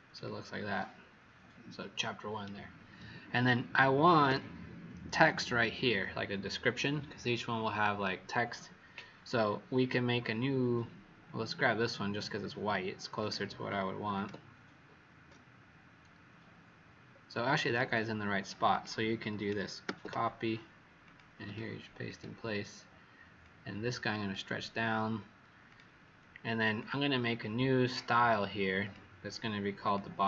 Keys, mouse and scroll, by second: 0.1 click, 4.2 w, 10.3-11.2 scroll down 1, 12.3-13.1 scroll down 1, 13.1 click, 17.4 Escape, 18.6 click, 19.8 ctrl+c, 21.0 click, 21.4 right click, 22.0 click, 23.3 click.